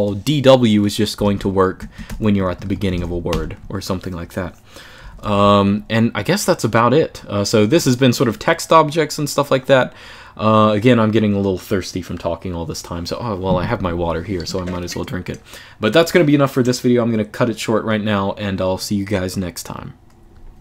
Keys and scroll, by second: 0.6-3.5 typing, 4.7-6.1 typing.